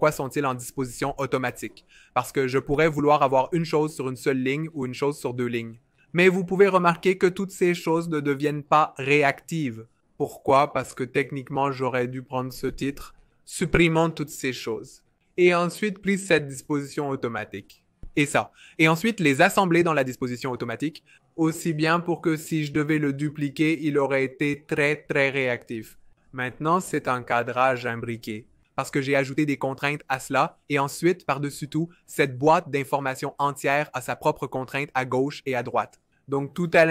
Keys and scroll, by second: 3.4 Return, 3.5-5.4 typing, 13.2 super+z, 13.4 super+z, 13.5 super+z, 15.8 super+z, 19.9 shift+a, 22.5 super+c, 22.8 Right, 23.2 super+v, 23.6 super+v, 24.0 super+v, 24.6 super+z, 24.9 super+z, 25.2 super+z, 27.6 BackSpace.